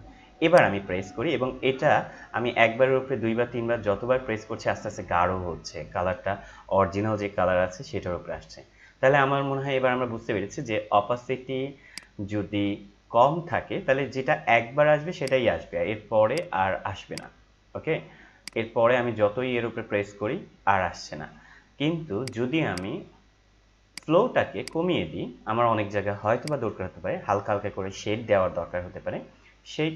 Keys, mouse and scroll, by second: 0.5-11.1 drag, 11.9 click, 15.2-29.9 drag.